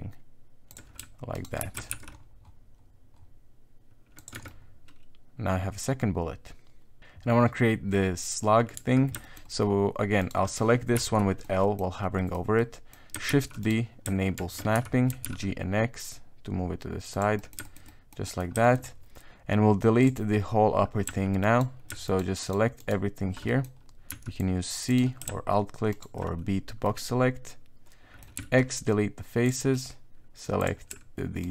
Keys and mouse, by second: 1.3 alt+right click, 1.6 s, 4.3 Tab, 4.5 middle click, 5.5-6.6 middle drag, 6.7 middle click, 6.9 middle click, 8.7 Tab, 9.2 shift+middle click, 10.2 right click, 10.9 l, 11.4 middle click, 11.7 middle click, 12.1 middle click, 12.6 middle click, 13.3 shift+d, 14.3 shift+Tab, 14.7 KP_1, 15.1 g, 17.3 middle click, 17.6 shift+middle click, 17.9 middle click, 18.2 middle click, 18.6 shift+middle click, 20.0 click, 21.4 alt+right click, 22.0 alt+shift+right click, 22.4 alt+shift+right click, 22.8 alt+shift+right click, 23.4 middle click, 25.9 alt+shift+right click, 26.8-28.2 middle drag, 28.3 x, 30.6 click, 31.4 alt+right click.